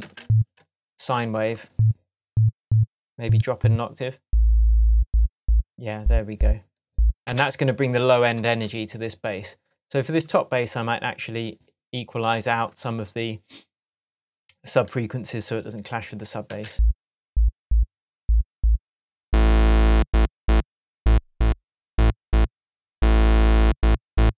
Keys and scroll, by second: 7.2 space, 16.4 space.